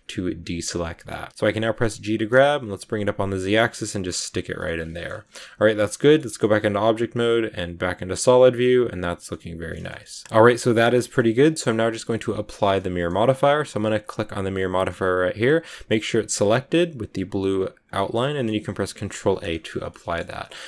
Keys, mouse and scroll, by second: 1.9 g, 4.3 scroll down 2, 4.4 scroll up 1, 4.5 middle click, 5.0 scroll up 1, 5.2-5.7 scroll down 8, 5.3 z, 5.8 middle click, 6.2 Tab, 6.3-13.8 middle drag, 13.8 click, 16.4 click, 18.2 click, 19.0 ctrl+a, 19.5-20.6 shift+middle drag.